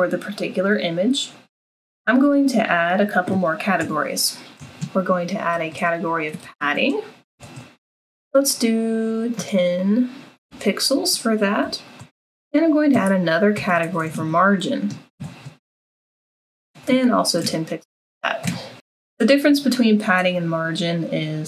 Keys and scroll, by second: 3.8 Return, 4.6 Tab, 5.3-7.3 typing, 8.6-20.5 typing, 12.9 Tab.